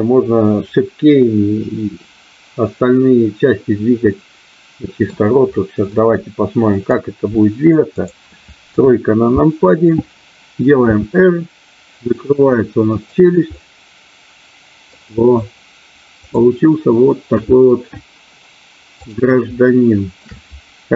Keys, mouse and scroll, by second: 4.1-5.4 middle drag, 5.9-7.1 middle drag, 7.8-9.1 drag, 9.2 KP_3, 10.8 r, 12.9 click, 13.6-14.9 middle drag, 16.2 click, 17.3 KP_1, 19.1 click, 19.7 middle click.